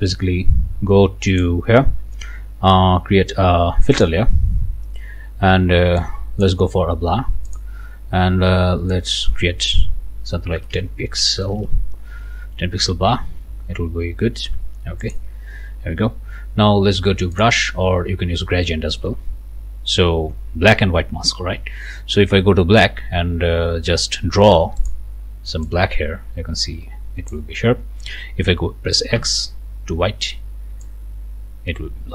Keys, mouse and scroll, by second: 1.3 click, 3.9 click, 6.0 click, 7.5 click, 8.9 click, 10.6 BackSpace, 11.4 1, 11.5 KP_0, 15.0 click, 15.9 scroll down 1, 17.4 click, 24.8 click, 25.6-27.5 drag, 29.2 x, 30.8-32.1 drag.